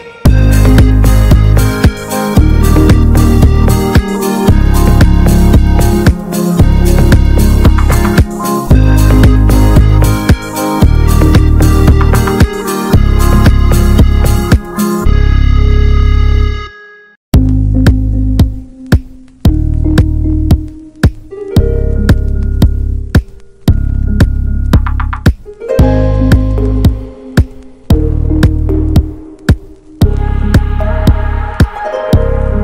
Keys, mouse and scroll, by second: 0.7 middle click, 0.9 click, 1.7-2.7 scroll down 1, 2.7 scroll down 1, 2.8-3.5 scroll up 3, 3.5-4.0 scroll up 1, 4.0 middle click, 4.4-10.1 drag, 10.1 middle click, 11.0 click, 11.9 middle click, 11.9-12.8 scroll up 2, 12.8 scroll up 1, 12.9 click, 13.2 middle click, 13.8-14.1 scroll down 1, 14.1 middle click, 14.7 click, 15.3 middle click, 15.9 scroll up 1, 16.0 ctrl+s, 16.1 shift+middle click, 16.5-18.2 drag, 18.2 Tab, 18.8 Tab, 19.0 click, 19.8 middle click, 20.3 click, 20.6 l, 20.9-22.6 middle drag, 22.6-24.7 drag, 24.7 middle click, 24.9 Tab, 25.4 ctrl+s, 26.1-28.9 drag, 28.9-29.8 scroll up 8, 29.8 click.